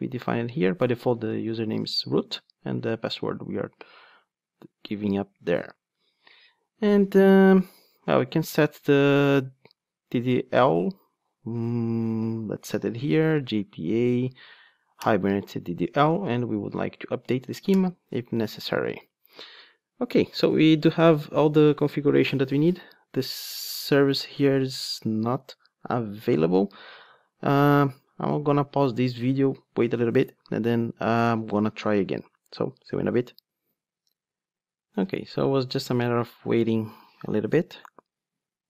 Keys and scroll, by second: 15.1 Return.